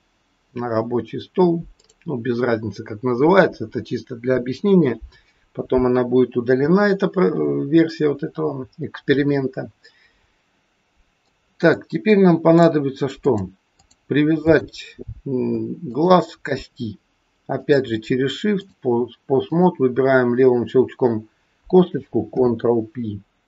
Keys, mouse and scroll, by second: 3.6-6.1 scroll down 3, 6.1-6.6 scroll up 2, 8.0-9.2 scroll down 1, 11.2 middle click, 12.6 click, 13.1 click, 14.3 click, 15.8 shift+click, 17.6 click, 19.4 click, 20.2-21.7 scroll up 2, 22.3 ctrl+p.